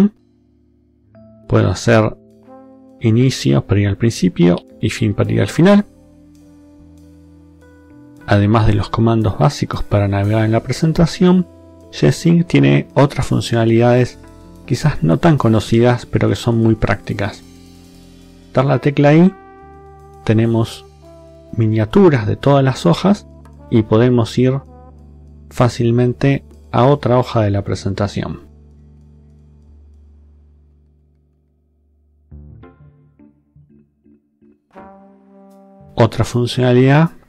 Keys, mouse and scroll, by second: 0.0 Up, 2.9 Home, 4.5 End, 17.9 i, 24.6 click, 26.3 i, 28.5 click, 29.5 click, 30.5 click, 31.9 i.